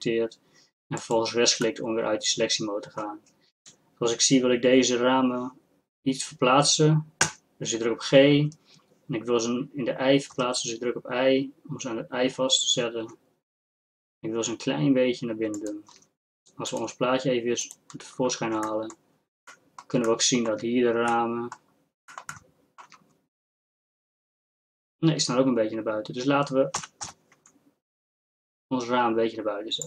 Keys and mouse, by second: 7.3 g, 16.7-18.7 drag, 18.7-20.2 middle drag, 20.2-26.8 drag, 26.8 g.